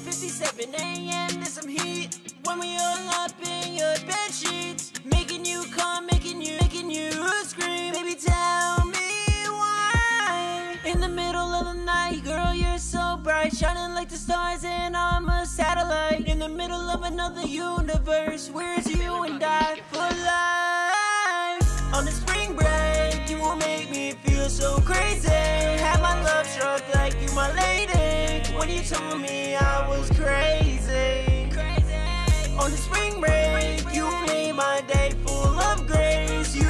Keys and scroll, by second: 8.3 super+s, 19.2 super+s, 22.2 super+s, 24.3 super+s.